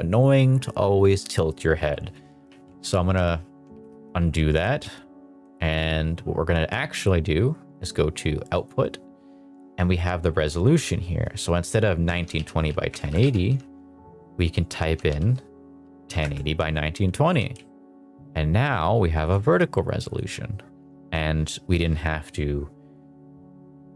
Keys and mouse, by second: 2.4 alt+r, 3.8 ctrl+z, 4.0 ctrl+z, 4.7 ctrl+z, 8.5 click, 10.5-16.2 drag, 12.9 BackSpace, 13.3 0, 17.2 g, 17.5 z, 19.2 click, 20.0 click.